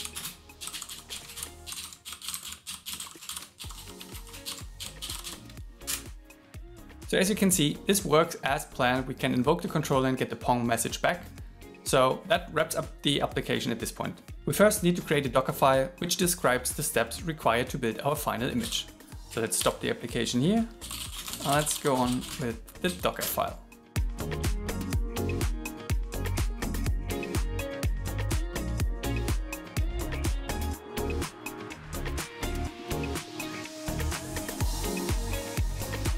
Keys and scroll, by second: 1.4 shift+8, 1.7 shift+7, 3.3 shift+-, 4.5 shift+7, 19.0 super+w, 19.6 ctrl+c, 22.3 shift+d, 23.8-25.4 typing, 27.0 shift+8, 29.6-30.5 typing, 31.6-32.5 typing, 35.6-36.1 typing.